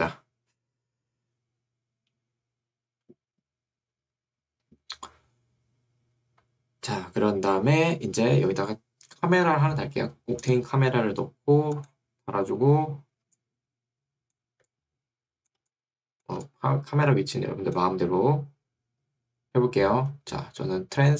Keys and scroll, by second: 13.4 2.